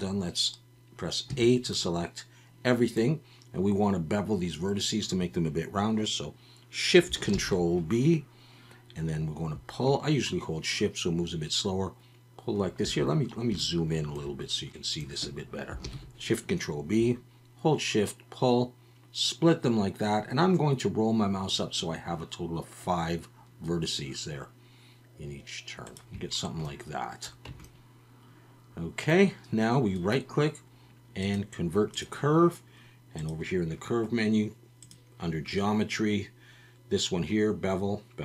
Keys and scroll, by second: 1.3 a, 7.3 ctrl+shift+b, 12.8 Escape, 15.8 ctrl+shift+b, 27.5 Tab.